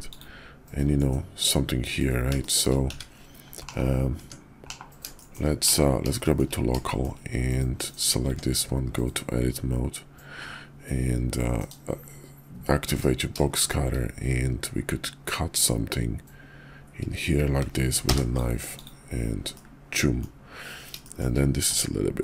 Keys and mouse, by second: 0.0 click, 2.3 shift+click, 2.8 `, 3.6 /, 4.1 Tab, 4.6 /, 5.1 shift+drag, 5.6 /, 6.1 shift+click, 6.8 shift+drag, 8.2 Tab, 11.5 alt+w, 12.8 KP_5, 14.9-18.8 drag, 19.5 middle click, 21.0 shift+middle click, 21.6 Tab.